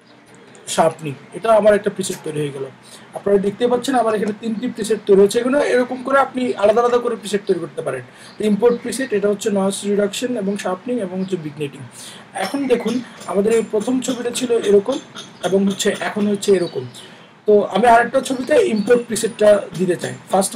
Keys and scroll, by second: 0.0-1.2 typing, 2.0 Return.